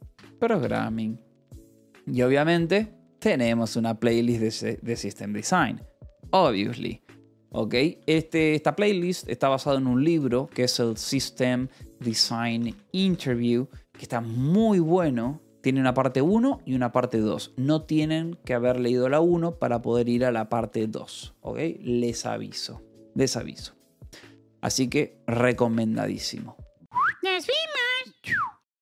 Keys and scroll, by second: 0.0-0.8 typing, 2.2 j, 8.6 k, 10.0 ctrl+l, 10.1-13.3 typing, 15.3 j, 25.0 k.